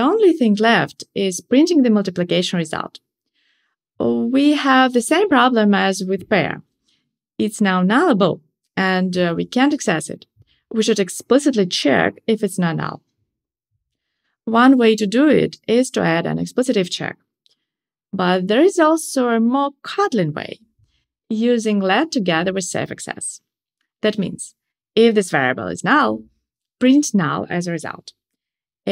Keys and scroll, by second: 15.4 Tab, 21.5 alt+shift+Left.